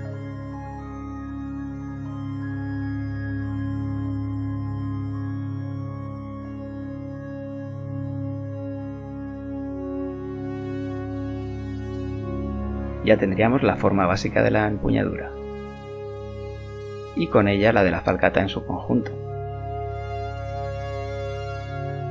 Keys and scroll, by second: 3.7 ctrl+z, 10.9 z, 14.5 Tab.